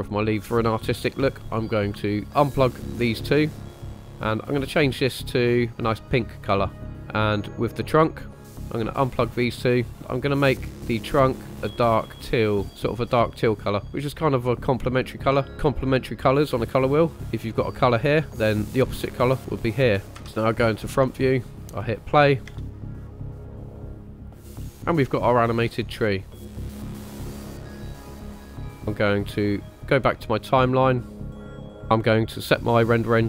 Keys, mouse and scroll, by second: 0.2 middle click, 2.1 ctrl+click, 2.1 ctrl+right click, 3.0-3.6 drag, 3.8 click, 4.4 click, 7.1 click, 8.3 middle click, 8.6 click, 9.5-9.9 drag, 10.0 middle click, 10.1 click, 15.4 click, 20.0 click, 20.0 shift+middle click, 20.0 scroll down 2, 20.1 KP_1, 21.1-21.5 shift+middle drag, 21.5 click, 21.7-22.2 scroll up 1, 22.5 space, 25.0 scroll up 1, 25.6 scroll down 1, 26.4 space, 26.7 click, 27.5 click, 27.8 space, 30.2 click, 31.3 click, 32.9-33.2 drag.